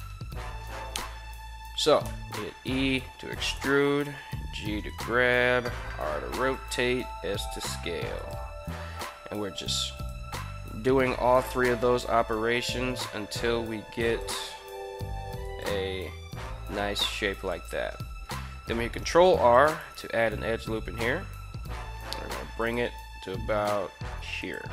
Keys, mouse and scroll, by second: 1.8 e, 3.0 click, 3.7 g, 4.6 click, 5.3 r, 6.2 click, 6.7 s, 7.9 click, 8.3 g, 9.7 click, 10.2 r, 11.2 click, 11.6 s, 12.4 click, 12.6 g, 13.8 click, 14.3 r, 15.3 click, 16.8 s, 17.2 click, 18.5 ctrl+r, 19.6 right click, 20.5 g, 22.4 drag, 22.6 r, 24.2 click, 24.6 g.